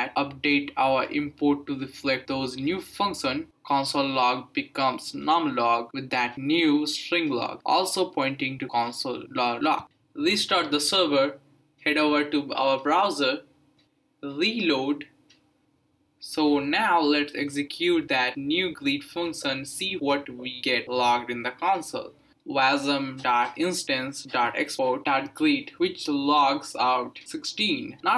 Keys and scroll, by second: 2.6-9.4 typing, 4.7 Tab, 4.8 Right, 4.9 Return, 8.0 Return, 10.6 ctrl+c, 10.9 Up, 11.3 Return, 15.2 Return, 22.5-26.4 typing, 26.9 Return.